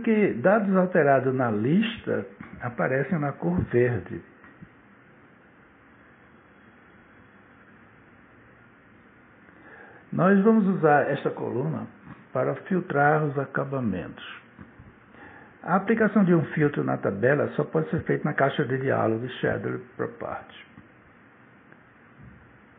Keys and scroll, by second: 8.8 Return.